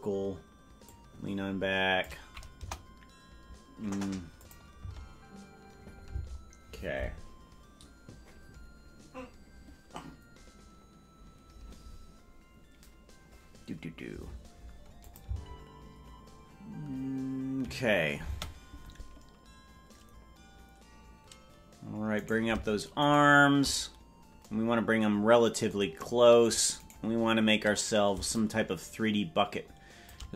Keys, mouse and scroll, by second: 0.8-2.1 drag, 2.5 KP_0, 4.4 click, 4.7 space, 6.1 space, 15.0-16.3 drag, 16.3 space, 18.3 space, 22.2 right click, 26.8 right click, 28.3-30.1 shift+drag.